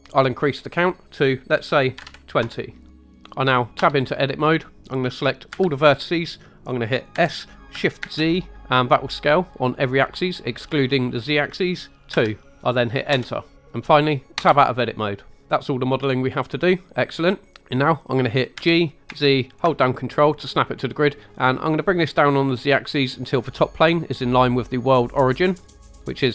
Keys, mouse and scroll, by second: 0.7-2.4 drag, 3.1 scroll down 1, 3.2 Tab, 3.8 Tab, 5.5 a, 7.1 s, 8.0 shift+z, 12.1 2, 13.1 Return, 13.6 scroll down 1, 14.3 Tab, 18.5 g, 19.1 z, 25.5 ctrl+click.